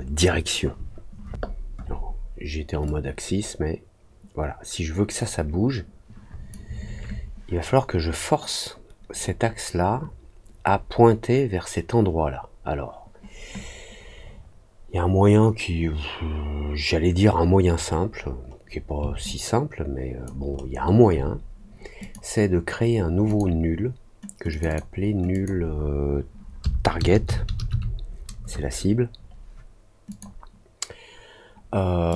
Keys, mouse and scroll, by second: 2.8-6.4 drag, 17.8 middle click, 18.1 middle click, 18.4 middle click, 19.2 alt+click, 20.5 alt+middle click, 21.9 click, 23.2 click, 24.4 click, 24.6 click, 25.2 click, 30.0 click, 32.0 click.